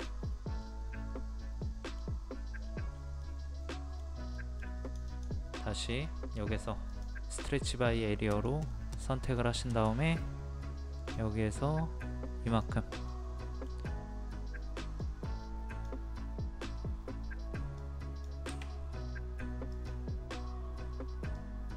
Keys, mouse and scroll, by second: 0.6-2.2 middle drag, 2.6-3.2 scroll up 1, 3.2-4.2 middle drag, 4.8 click, 8.6 scroll up 1, 8.7 middle click, 9.7-10.0 scroll up 1, 11.0 click, 13.1-14.2 middle drag, 15.0-21.7 drag.